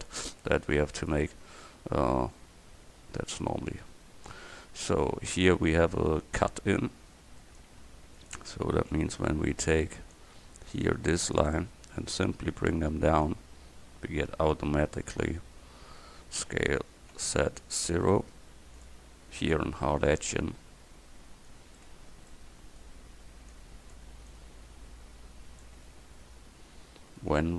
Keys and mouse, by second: 5.7 Tab, 9.5 a, 9.8 c, 16.5 s, 19.7 Tab, 21.9 Tab, 23.6 middle click, 23.8 click.